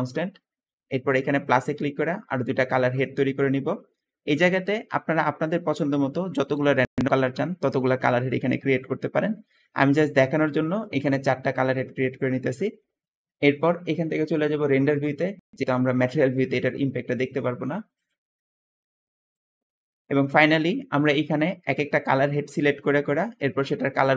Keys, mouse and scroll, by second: 10.6-12.4 drag.